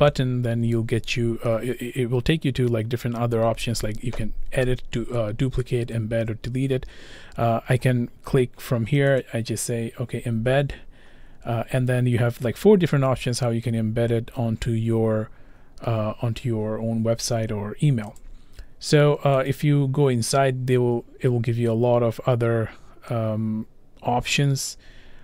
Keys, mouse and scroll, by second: 9.2 click, 18.2 click, 19.5 click.